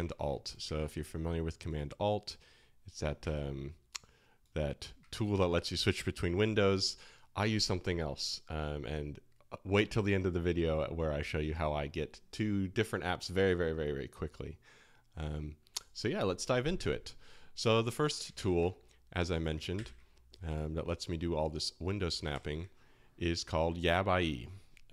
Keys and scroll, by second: 0.7 super+Tab, 3.2 super+Tab, 18.3 super+w, 19.7 super+w, 22.3 shift+super+].